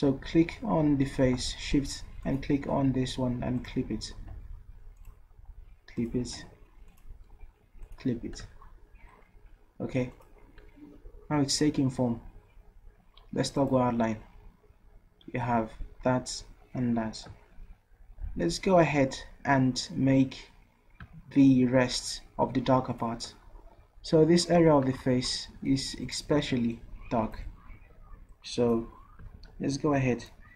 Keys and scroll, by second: 29.4 ctrl+z.